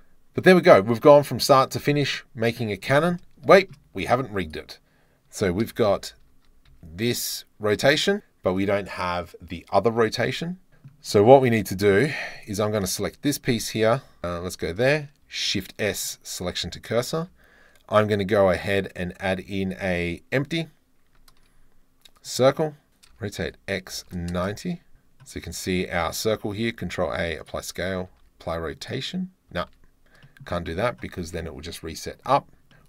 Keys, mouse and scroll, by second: 1.3 middle click, 1.7 middle click, 3.2 middle click, 3.6 shift+middle click, 4.5 middle click, 5.7 r, 5.9 y, 6.7 x, 8.5 click, 10.7 right drag, 11.4-11.8 middle drag, 11.9-12.4 shift+middle drag, 12.5-14.0 middle drag, 14.0 Tab, 14.1 middle click, 14.2 3, 15.5 shift+s, 16.7 Tab, 17.2 shift+a, 23.2 r, 23.5 x, 24.0 KP_9, 24.0 KP_0, 24.4 KP_Enter, 25.6 s, 26.6 ctrl+a, 28.1 ctrl+a, 29.8 ctrl+z, 30.3 click, 32.7 shift+click.